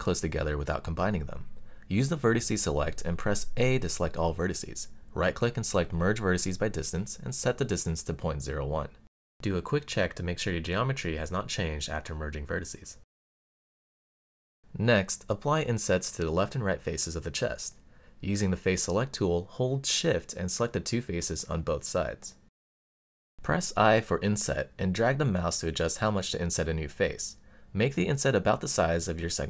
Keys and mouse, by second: 1.1 click, 1.6 middle click, 2.5 a, 3.2-6.3 right drag, 8.0-9.4 drag, 10.9-12.9 middle drag, 13.8 middle click, 16.0 click, 17.5 alt+click, 18.3 click, 19.6 middle click, 21.6 shift+click, 22.5-23.8 middle drag, 24.5 i, 27.5 click, 28.0-29.4 middle drag.